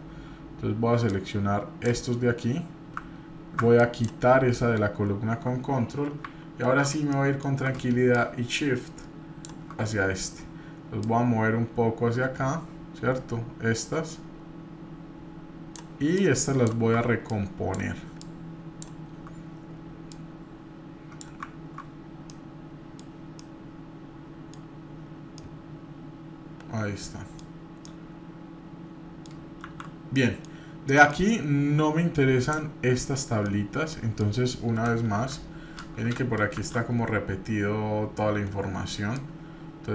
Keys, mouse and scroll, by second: 0.5 scroll up 1, 1.1 click, 2.7 scroll up 1, 3.8 ctrl+click, 5.5-5.8 scroll down 2, 6.2-6.8 scroll down 2, 7.1 shift+middle click, 8.1-9.6 shift+drag, 11.0-15.7 drag, 16.2 click, 17.3-19.2 shift+drag, 20.1-21.2 drag, 21.9 scroll up 2, 22.3 middle click, 23.1 scroll down 1, 23.4-24.5 middle drag, 24.5-25.0 scroll down 3, 25.4-27.4 middle drag, 27.6 scroll up 1, 27.8-29.3 middle drag, 29.6 shift+z, 30.1 middle click, 30.4 scroll down 1, 30.9 middle click, 31.2 scroll up 1, 32.4 click, 33.2 middle click, 33.5 scroll down 1, 33.9 middle click, 34.8 Page_Down, 35.1 KP_7, 36.6 shift+z, 39.1-39.9 drag.